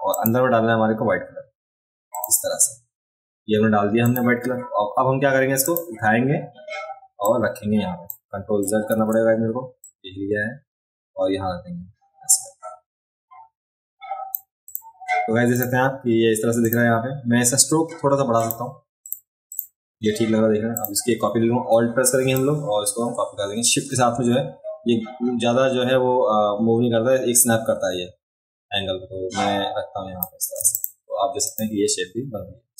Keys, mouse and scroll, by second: 0.1 click, 2.1 click, 4.0 click, 5.6 click, 7.2 click, 8.9 ctrl+z, 9.8-14.3 drag, 14.6 click, 15.5 click, 16.6 click, 18.4 click, 19.0 click, 19.5 click, 20.8 click, 30.7 click, 31.5 click.